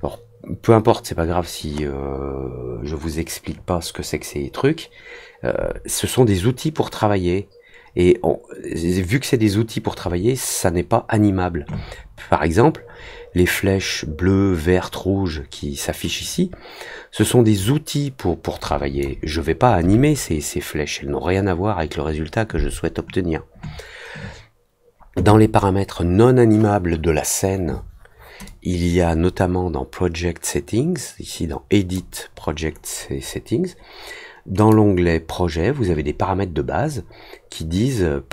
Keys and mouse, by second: 16.1-19.0 drag, 28.4-31.9 drag, 34.5 click.